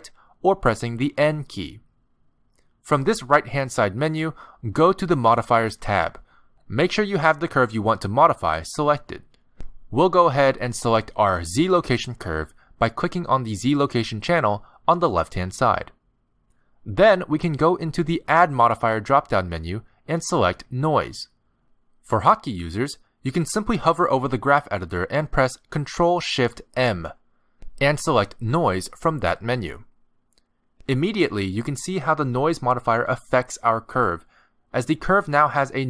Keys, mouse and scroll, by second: 0.2 n, 1.3 n, 2.6 n, 5.2 click, 11.2 click, 13.1 click, 15.9 click, 18.4 click, 23.7 ctrl+z, 26.2 ctrl+shift+m, 33.1-34.4 scroll down 2, 34.4 scroll down 2, 34.4 a.